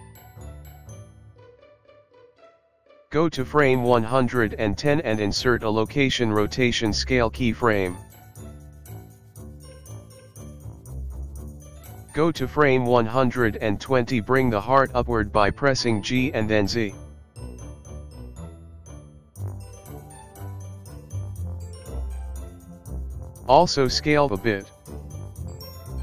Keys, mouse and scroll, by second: 2.3 i, 4.6 click, 8.2 i, 11.2 click, 15.1 g, 23.9 s.